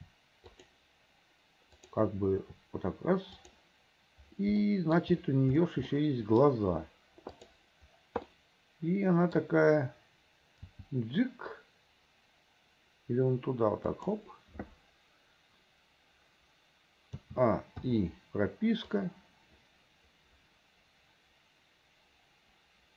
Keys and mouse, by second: 1.9 click, 2.5 r, 4.9 click, 6.1 click, 7.5 click, 8.4-9.4 middle drag, 10.8 g, 17.3 a, 17.9 i, 19.1-22.9 right drag.